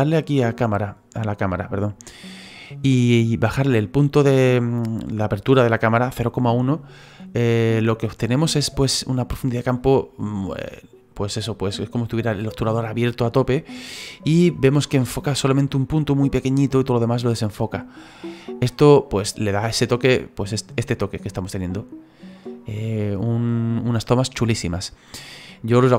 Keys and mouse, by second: 0.2 click, 7.7 click, 8.4 click, 18.4 click, 21.0 click, 24.7 click.